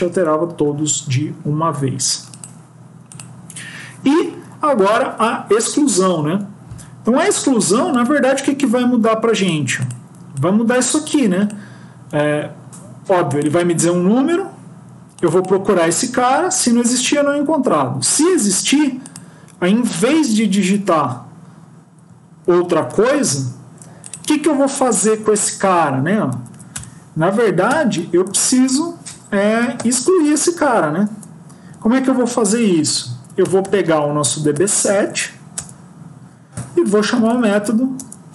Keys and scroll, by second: 20.4 ctrl+x, 24.9 Left, 25.1 Left, 26.2 shift+End, 26.7 BackSpace, 27.7 ctrl+;, 29.1 Escape, 29.7 ctrl+;, 35.5 Return, 37.9 Return.